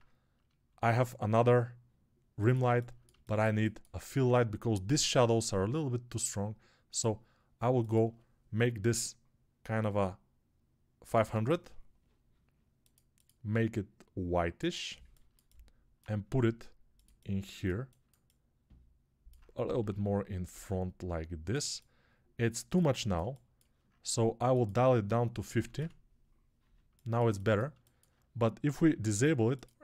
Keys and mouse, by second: 0.7 shift+d, 11.1 KP_0, 14.2-29.8 right drag, 16.1 g, 19.7 g, 26.6-29.8 alt+shift+drag, 26.6 alt+shift+middle click.